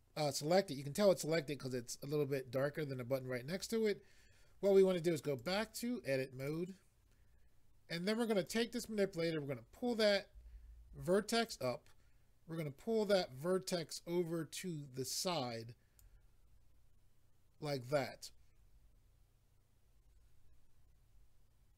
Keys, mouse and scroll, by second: 5.4 click, 6.4 click, 8.5 click, 13.1 click.